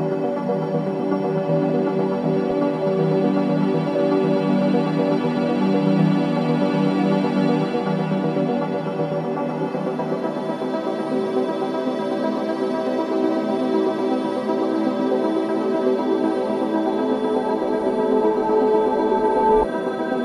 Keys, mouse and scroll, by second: 4.8-5.3 scroll down 1, 5.4 alt+click, 6.0 ctrl+z, 9.1 ctrl+z, 12.1 click, 15.4-20.2 drag.